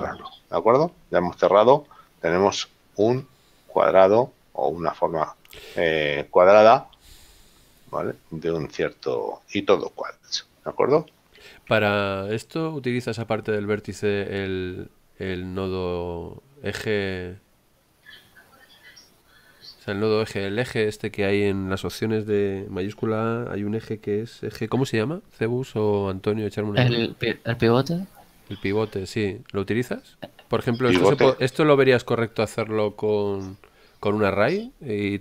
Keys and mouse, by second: 0.8 middle click, 3.1 shift+middle click, 4.7 middle click, 13.5 middle click, 17.8 shift+middle click, 27.5 Tab, 28.2 middle click.